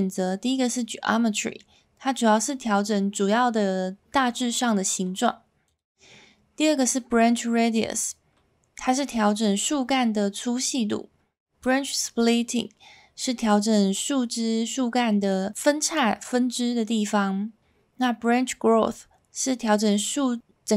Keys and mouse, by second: 5.6-20.7 drag.